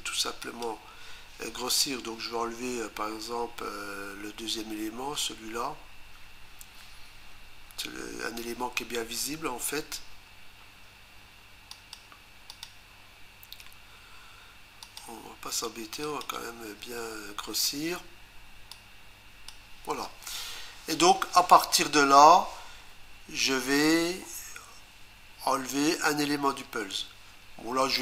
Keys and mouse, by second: 0.4 click, 11.7 shift+click, 12.5 shift+click, 14.8 shift+click, 16.0 shift+click, 18.7 click.